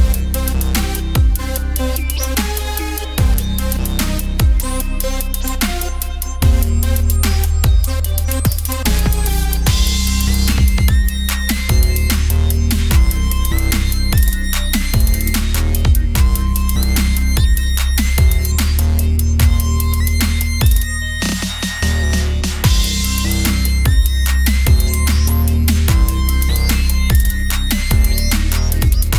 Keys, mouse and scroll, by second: 0.5 middle click, 0.8 right click, 1.2 Tab, 1.3 middle click, 2.8 middle click, 3.5 KP_Decimal, 4.3 a, 4.5-5.6 middle drag, 5.6 click, 6.0 KP_Decimal, 6.3 middle click, 6.8 KP_1, 7.9 middle click, 8.6-9.8 drag, 9.8 middle click, 10.4 click, 11.2 click, 11.7 middle click, 12.5 shift+d, 12.9 click, 13.2 ctrl+z, 13.5 shift+d, 13.9 click, 14.4 right click, 14.5 ctrl+z, 14.8 ctrl+z, 14.9 ctrl+z, 15.0 ctrl+z, 15.5 click, 15.7 shift+d, 16.3 o, 16.7 click, 17.2 p, 17.6 Tab, 17.8 click, 18.0 Tab, 18.5 ctrl+r, 19.7-20.8 drag, 20.8 s, 24.0-25.1 drag, 24.9 alt+m, 25.4-26.6 drag, 26.3 alt+m, 27.4-28.8 middle drag, 28.8 KP_1.